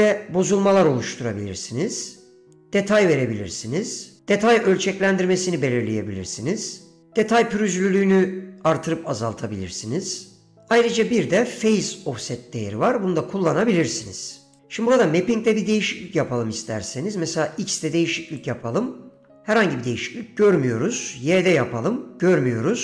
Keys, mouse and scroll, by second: 0.0-4.2 drag, 4.6-7.1 drag, 7.1 ctrl+z, 7.4-10.7 drag, 10.7 ctrl+z, 11.7-14.7 drag, 16.9-18.5 drag, 19.3 ctrl+z, 21.1 click, 22.4 ctrl+z.